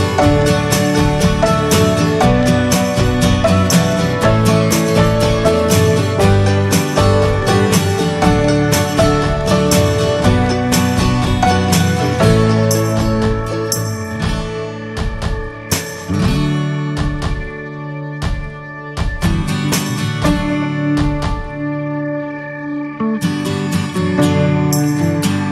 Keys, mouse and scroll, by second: 0.0 Tab, 0.2 click, 0.4-0.8 scroll down 2, 1.4 ctrl+s, 1.6 drag, 2.2 Tab, 2.6 alt+z, 3.0 shift+middle click, 3.1-3.5 scroll up 6, 3.7 click, 4.9 click, 5.8 Tab, 5.9 click, 6.2-6.6 scroll down 1, 6.6 click, 7.4 ctrl+a, 7.9-8.4 scroll down 2, 7.9 alt+z, 8.2 click, 8.5-8.8 middle drag, 8.8 ctrl+s, 9.0 drag, 9.2 scroll down 1, 9.3 middle drag, 9.6 ctrl+s, 9.8 click, 10.0 shift+middle click, 10.5 shift+a, 11.6 scroll down 2, 11.8 alt+middle click, 12.2 alt+middle click, 12.9 click, 14.2 shift+middle click, 14.4 scroll up 1, 14.6 s, 15.9 s, 18.2 click, 18.5 middle drag, 18.7 scroll up 1, 18.7 click, 19.6 scroll up 2, 20.1 click, 21.5 s, 22.4 click, 23.8-24.4 drag, 25.2 s.